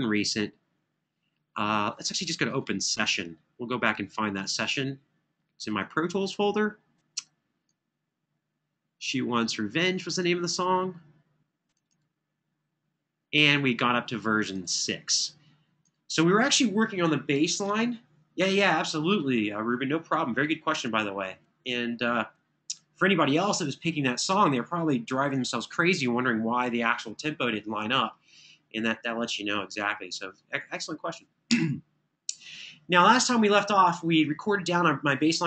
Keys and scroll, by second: 31.3 Return.